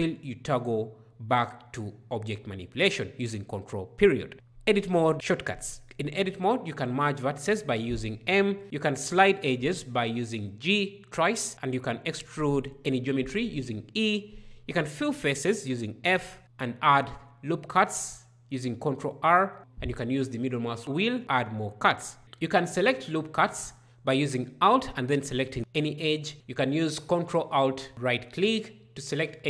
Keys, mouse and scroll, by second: 5.6 m, 8.8 g, 11.5 e, 14.3 f, 16.5 ctrl+r, 20.5-22.5 scroll, 23.2 alt+right click, 26.9 ctrl+right click.